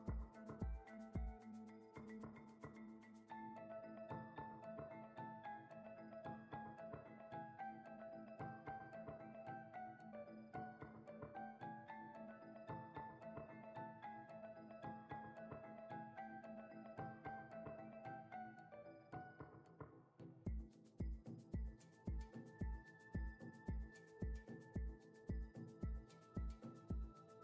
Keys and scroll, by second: 19.5 Tab, 20.4 a, 21.5 Tab.